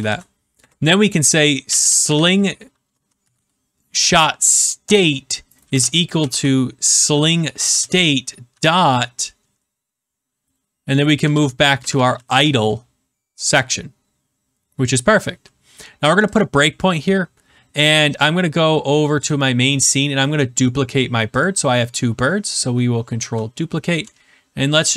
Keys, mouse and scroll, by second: 0.0-3.7 typing, 4.7 Return, 5.6-9.0 typing, 7.7 Return, 10.9-12.4 typing, 16.3 click, 19.3 click, 20.0 middle click, 20.2 middle click, 20.4 middle click, 20.5 middle click, 21.4 click, 23.1 ctrl+d.